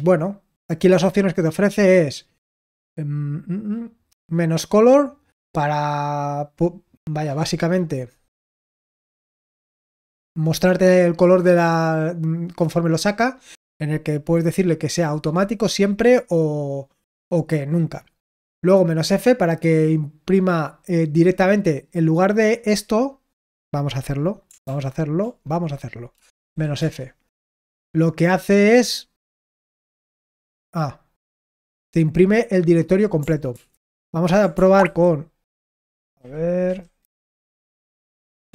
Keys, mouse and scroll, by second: 23.1-24.4 drag.